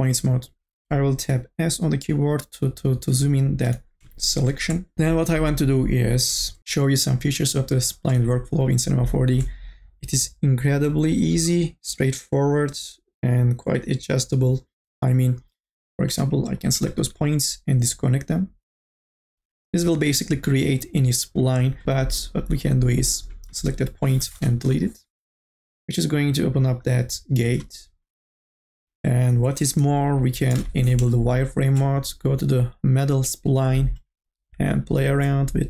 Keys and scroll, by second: 3.9 s, 24.6 Delete, 30.5 n, 30.9 b.